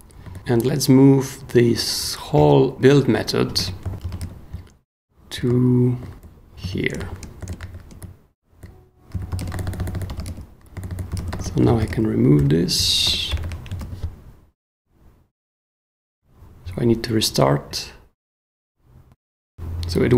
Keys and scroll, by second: 0.2 super+j, 3.7-6.1 typing, 6.6 super+p, 7.0 ctrl+super+f, 7.4 ctrl+j, 7.6 ctrl+f, 8.0 ctrl+j, 8.7-13.3 typing, 13.8 super+s, 19.5 f.